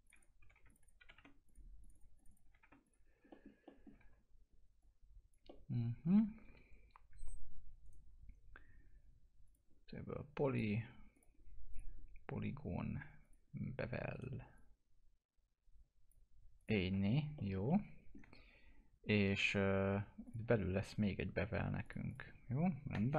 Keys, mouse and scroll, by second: 0.4 5, 0.7 click, 1.0 5, 1.4 click, 2.4 5, 2.8 click, 3.3 middle click, 4.0 w, 4.8 click, 5.5-7.8 alt+middle drag, 7.8 right click, 9.4 click, 12.0-13.2 scroll up 1, 13.2 click, 14.1 right click, 14.5-16.6 drag, 16.9 F4, 17.4 middle click, 17.7-20.8 alt+middle drag, 20.8 click.